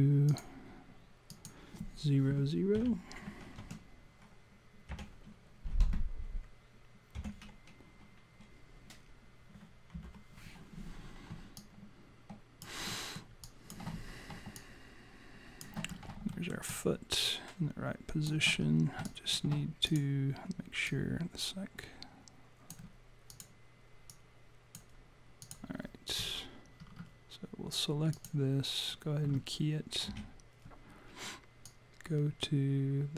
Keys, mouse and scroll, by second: 0.3 click, 1.3 click, 11.6 alt+click, 12.9 alt+middle click, 13.4 alt+click, 14.0 scroll up 1, 14.6 alt+click, 14.6-15.0 scroll up 1, 15.9-16.3 scroll up 2, 16.3 alt+middle click, 16.7 alt+click, 18.6-18.9 scroll up 2, 19.1 alt+click, 19.9 click, 20.8 click, 21.6 alt+click, 23.3 click, 24.1 click, 25.4 click, 26.8 scroll down 3, 28.1 click, 30.1 s, 31.7 click.